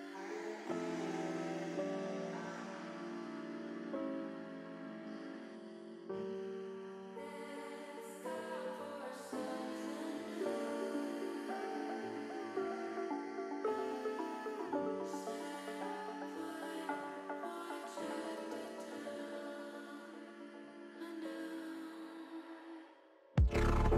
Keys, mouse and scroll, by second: 3.6 middle click, 4.2 shift+middle click, 4.8 shift+middle click, 5.3 middle click, 6.2 middle click, 6.6 middle click, 7.1 shift+middle click, 7.6 shift+middle click, 8.2-9.3 shift+middle drag, 9.6 middle click, 12.7 click, 13.8 click, 14.2-15.3 middle drag, 16.5 click, 19.5 Tab, 19.9 middle click.